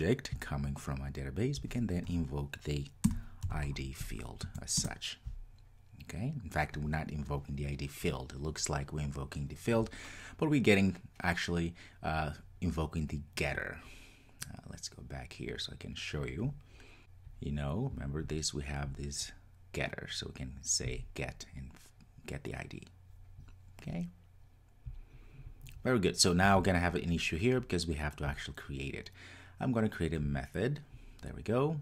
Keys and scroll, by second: 4.8 Return.